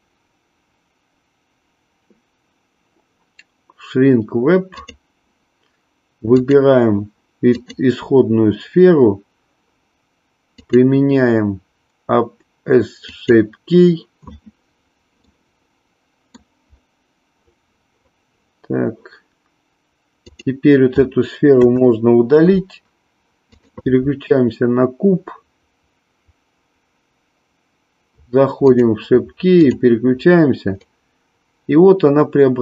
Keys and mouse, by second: 10.7-13.3 drag, 15.3-16.4 middle drag, 21.5 Delete, 23.4 click, 29.6 click, 30.9-32.6 drag.